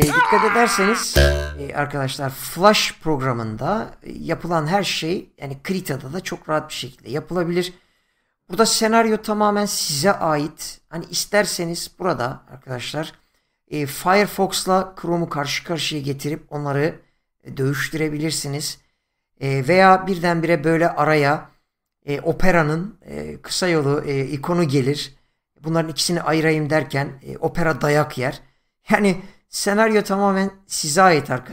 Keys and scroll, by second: 1.7 space.